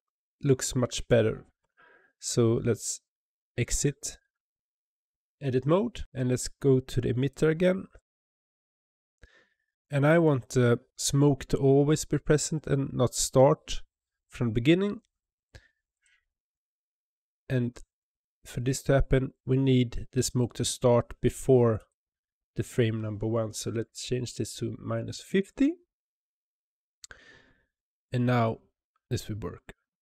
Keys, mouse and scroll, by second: 1.4 Tab, 7.2 click, 7.8 click, 8.2 click, 15.8 click, 21.6-24.6 drag.